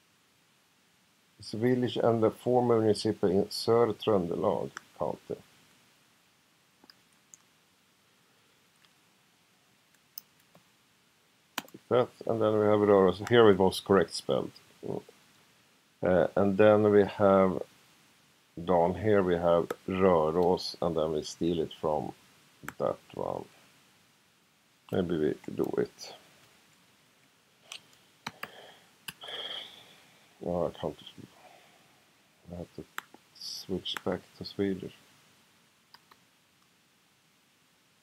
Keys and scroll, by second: 7.0 super+c, 10.2 super+v, 10.5 ,, 11.5 space, 22.7 ø, 29.1 BackSpace, 35.9 ', 36.1 '.